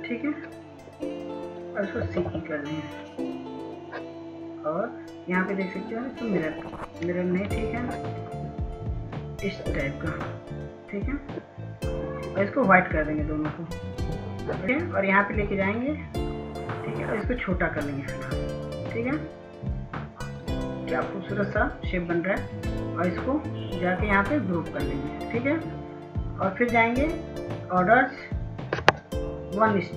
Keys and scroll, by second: 2.3-3.2 typing, 7.9 ctrl+z.